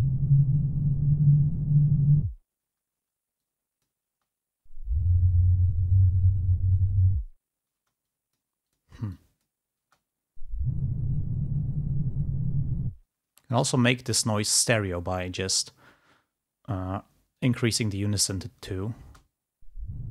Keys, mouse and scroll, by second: 3.1 space, 3.4 click, 4.2 space, 7.9 space, 8.2 click, 8.8 click, 9.3 click, 10.0 space, 13.4 space, 14.2 click, 17.4 click, 19.2 space.